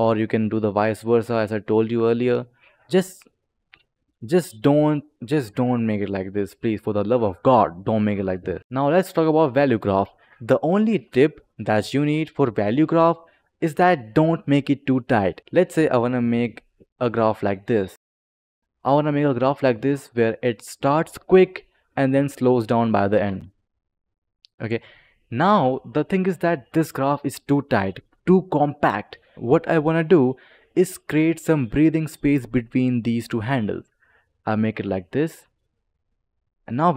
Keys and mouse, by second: 0.5 click, 2.5 click, 3.1 click, 4.0 click, 5.8 click, 8.6 click, 15.5 click, 18.7 click, 21.7 click, 23.1 space, 25.5 click, 26.2 click, 27.1 click, 31.0 click, 32.6 click, 35.3 click, 36.2 click, 36.8 click.